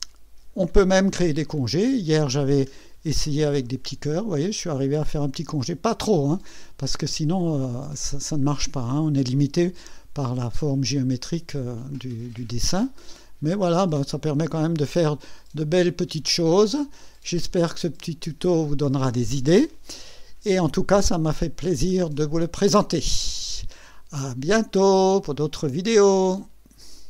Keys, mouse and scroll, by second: 3.6 click, 13.4 click, 14.5 click, 15.4 scroll up 1, 16.0-17.9 drag.